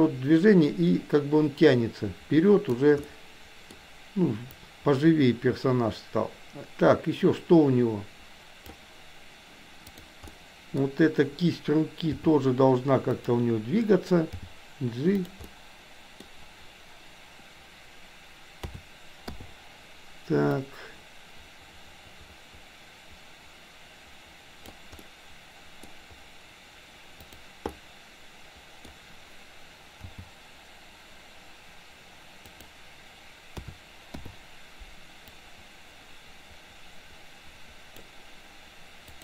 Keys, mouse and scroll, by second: 3.0 middle click, 4.5-8.8 drag, 9.9 click, 10.3 middle click, 12.1 r, 14.4 g, 15.4 middle click, 18.6 a, 19.3 i, 20.5-24.8 drag, 25.0 middle click, 27.1 click, 27.6 middle click, 30.0 g, 33.5 a, 34.1 i, 35.3-38.0 drag, 39.1 click.